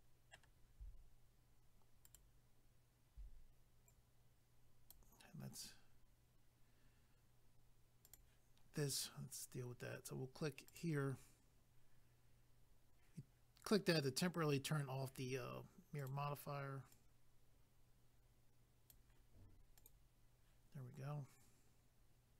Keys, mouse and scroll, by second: 2.0 ctrl+right click, 2.1 ctrl+right click, 3.9 click, 8.0 click, 8.1 click, 10.7 click, 10.8 click, 16.0 click, 16.1 click, 16.9 click, 17.6 click, 19.8 click, 19.8 click.